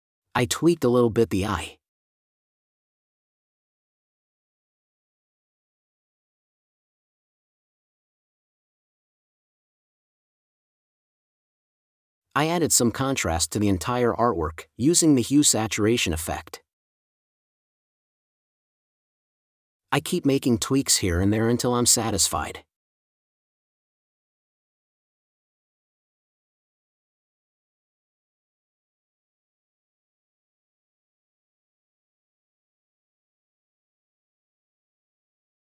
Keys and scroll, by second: 0.7 space, 3.8 super+space, 7.4 space, 9.9 super+e, 10.7 super+m, 12.3 space, 13.7 Tab, 14.5 space, 18.5 space, 21.8 n, 31.6 space, 34.9 space.